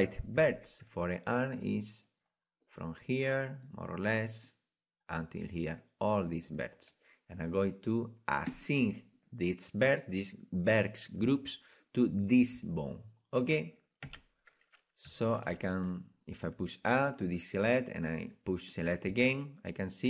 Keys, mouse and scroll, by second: 1.7 c, 8.6-14.0 drag, 14.0 Tab, 15.0 Tab, 15.4 a, 18.8-20.0 drag.